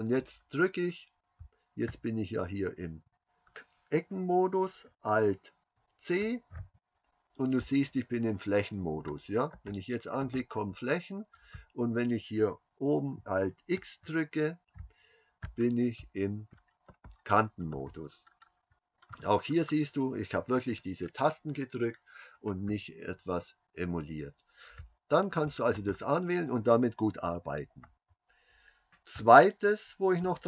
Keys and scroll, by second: 6.8 alt+c, 14.4 alt+x.